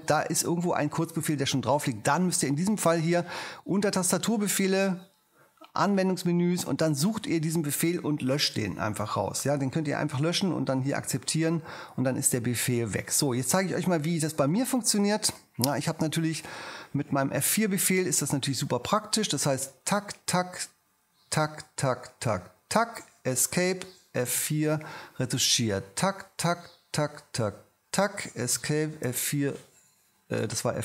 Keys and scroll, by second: 17.4 m, 23.6 ⟲, 24.3 F4, 28.5 ⟲, 29.0 F3.